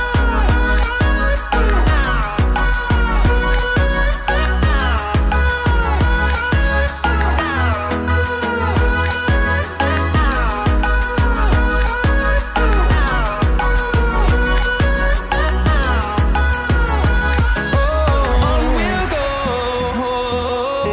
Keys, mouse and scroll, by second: 1.3 click, 3.6 scroll down 1, 5.1-6.5 scroll up 1, 6.5 click, 15.4 F10, 15.5-20.9 drag.